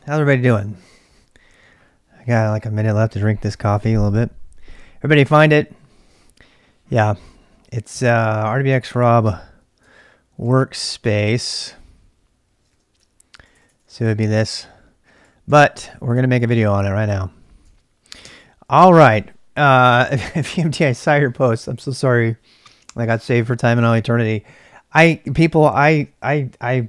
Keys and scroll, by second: 9.2 ctrl+c, 9.8 ctrl+[, 9.9-11.6 typing, 12.7-13.8 typing, 14.9-16.8 typing, 18.2 ctrl+c, 18.8 typing.